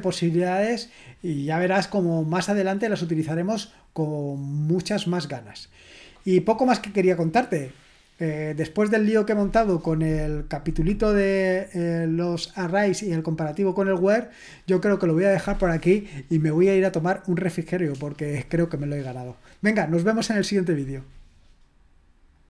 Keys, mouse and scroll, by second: 22.3 click.